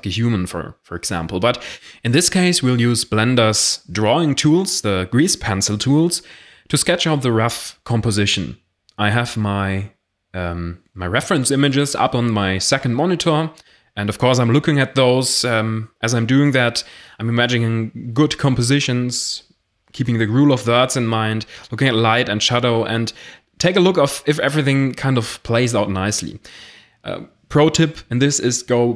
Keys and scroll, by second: 26.5-28.9 typing.